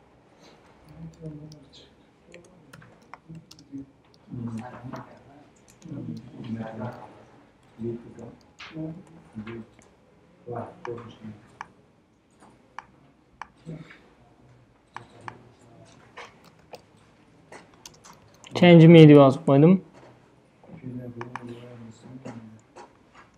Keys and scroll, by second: 0.7-9.2 typing, 16.0-18.7 typing, 19.0 Return.